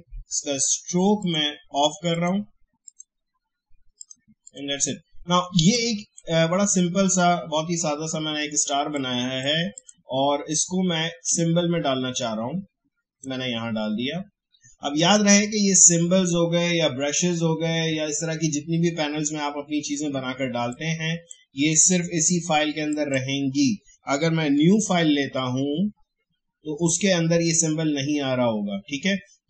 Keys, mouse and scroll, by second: 1.2-15.0 drag, 20.7-22.3 drag, 22.3 Delete, 22.9 click, 24.8 ctrl+n.